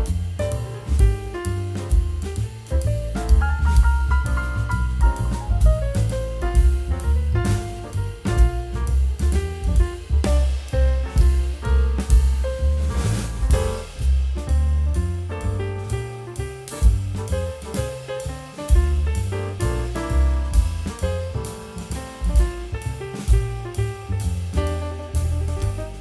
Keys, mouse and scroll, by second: 0.0 middle click, 3.8 middle click, 5.9 middle click, 6.1 g, 6.2 g, 7.7 middle click, 8.0-8.3 scroll up 1, 8.3-8.7 scroll down 1, 8.7 t, 8.8 z, 9.0 scroll down 1, 9.1 middle click, 9.4 w, 12.0 middle click, 12.6 ctrl+click, 14.7 alt+middle click, 14.7 scroll up 1, 15.0 scroll down 1, 15.0-15.3 scroll, 15.3 alt+middle click, 15.3 r, 16.2 alt+middle click, 16.5 scroll down 1, 16.8 w, 17.4 scroll down 1, 17.5 middle click, 17.7 scroll up 1, 19.3-19.8 alt+scroll up 2, 20.5 scroll down 1, 25.6 r.